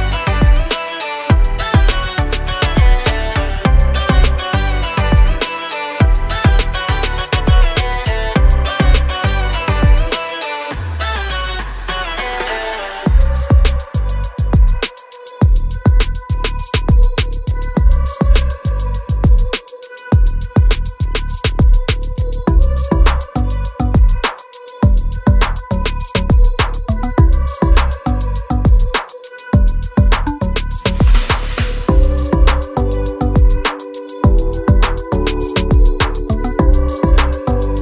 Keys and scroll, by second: 2.0 p, 3.1 space, 4.4 l, 5.7 space, 7.5 Escape, 10.6 m, 11.6 Up, 12.6 space, 13.6 r, 16.5 space, 16.8 e, 19.3 r, 21.9 space, 22.1 e, 23.9 r, 25.1 space, 25.4 r, 25.7 e, 28.0 r, 29.2 space, 29.4 e, 30.5 r, 31.9 space, 32.1 e, 34.1-36.3 typing, 37.0 Escape.